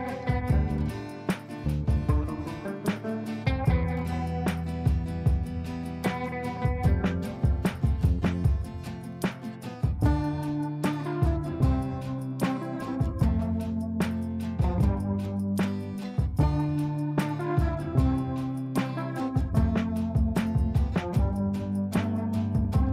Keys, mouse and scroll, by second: 0.0 click, 0.9 ctrl+a, 2.8-7.9 typing, 8.7 ctrl+space, 10.1 click, 14.8 click, 15.7 click, 16.2 shift+click, 16.5 shift+c, 16.9-19.7 drag, 19.7-22.9 shift+drag.